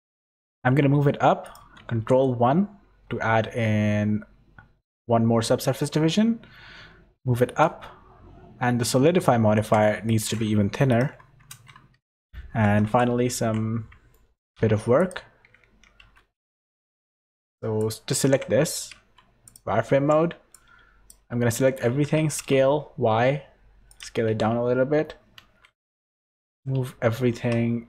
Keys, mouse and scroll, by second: 0.1 middle click, 0.4 g, 1.8 ctrl+1, 2.4 middle click, 7.4 click, 10.0 click, 12.0 Tab, 12.0 click, 12.0 middle click, 12.8 KP_7, 13.3 Tab, 14.1 shift+middle click, 14.5 z, 14.9 click, 16.0 z, 16.3 click, 16.8 click, 17.0 Tab, 17.3 click, 17.7 click, 18.3 Tab, 18.9 z, 19.4 click, 20.0 1, 20.5 click, 21.9 s, 24.2 g, 26.4 g.